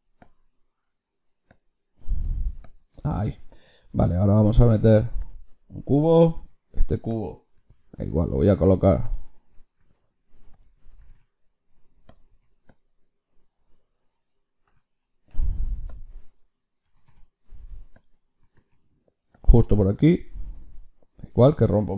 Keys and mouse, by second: 2.5-5.2 drag, 3.7 shift+a, 6.3 s, 7.4 g, 9.7 g, 10.9 g, 12.2 s, 14.6 KP_Subtract, 15.2 ., 16.7 g, 18.3 g, 21.5-21.9 drag.